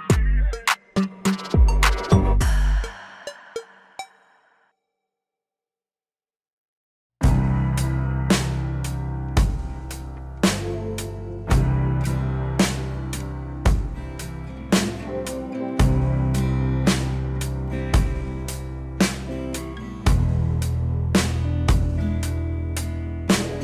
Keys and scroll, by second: 0.6 alt+w, 15.5 alt+w, 17.2 F4.